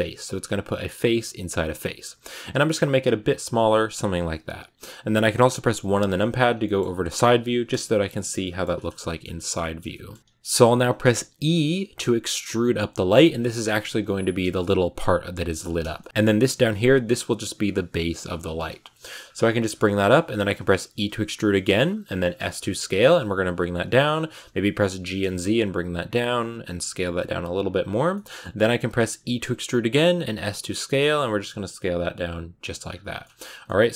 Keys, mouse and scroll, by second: 4.5 KP_1, 6.0-8.3 scroll down 1, 8.3 shift+middle click, 8.7-9.5 scroll down 2, 8.9 shift+middle click, 9.5 shift+middle click, 10.2 s, 11.3 e, 15.8-18.0 shift+middle drag, 18.0 scroll down 3, 18.2 shift+middle click, 19.0-19.3 scroll up 3, 19.3-20.7 shift+middle drag, 20.7 e, 22.3 s, 24.9 g, 26.3 s, 28.0 shift+middle click, 28.2-28.5 scroll up 2, 28.5 s, 29.1 e, 30.1 s, 32.7-33.3 scroll down 9, 33.1 middle click, 33.5 middle click.